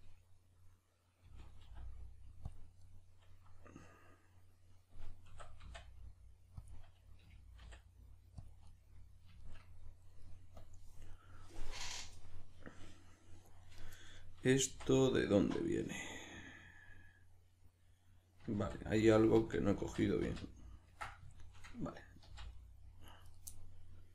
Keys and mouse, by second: 1.2 g, 2.5 click, 2.8-5.3 middle drag, 5.3 s, 6.7 click, 7.2 g, 8.5 click, 8.7-10.6 middle drag, 10.6 click, 11.1-13.8 middle drag, 13.8 right drag, 14.2-24.1 middle drag, 14.6 z, 18.6 ctrl+z, 22.2 c, 23.3 right click.